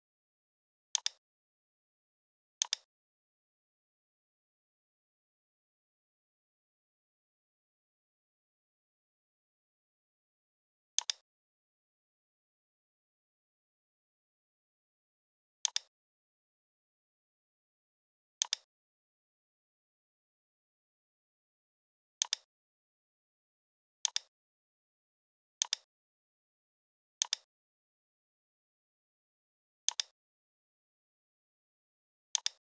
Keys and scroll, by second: 5.5 v, 6.7 ctrl+c, 7.7 ctrl+f, 13.2 i, 16.6 l, 20.6 i, 23.2 v.